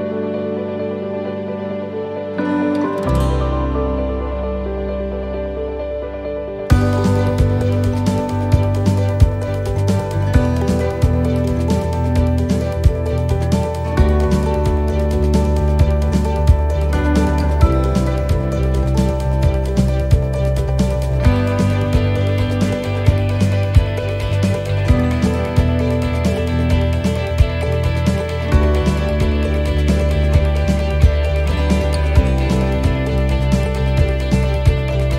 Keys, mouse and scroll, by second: 2.3 middle click, 3.0 shift+middle click, 3.5 middle click, 4.7 click, 5.8 middle click, 7.4 ctrl+r, 10.9 alt+shift+right click, 12.5 e, 15.8 middle click, 16.5 shift+middle click, 17.0 middle click, 18.6 ctrl+r, 23.3 alt+shift+right click, 24.2 e, 25.4 s, 27.3 middle click, 30.7 middle click, 32.3 scroll down 1, 32.6 middle click, 33.4 shift+middle click, 33.9-34.7 scroll up 2, 34.3 middle click.